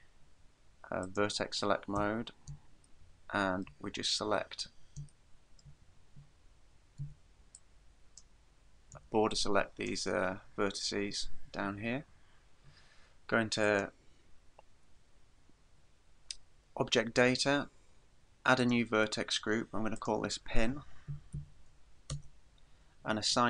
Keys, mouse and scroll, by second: 1.1 click, 2.0 a, 3.1 shift+middle click, 3.9-5.0 scroll up 9, 5.3 shift+middle click, 5.9-6.5 scroll up 2, 7.0 v, 7.6 click, 8.9 b, 13.7 click, 18.6 click, 20.0 click.